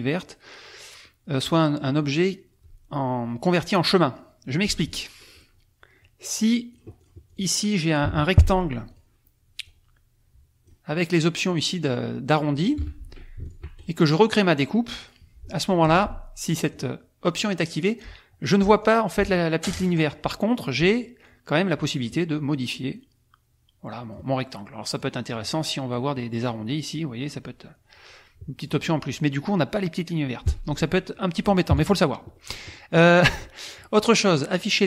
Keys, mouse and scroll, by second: 4.6 F1, 4.8 click, 5.2 click, 5.3 right click, 5.5 click, 6.7 right click, 6.8-7.5 drag, 8.0 Delete, 8.9 click, 11.5-12.8 drag, 12.8 F1, 13.4 shift+click, 13.7 shift+right click, 14.9 click, 15.8 F2, 16.7 click, 17.3 click, 18.8 click, 19.1 click, 21.2 click, 23.0-24.3 drag, 24.9-26.1 drag, 26.4-28.8 drag, 30.4 F1, 30.6 click, 31.7 KP_Subtract, 32.3 click, 33.4 click.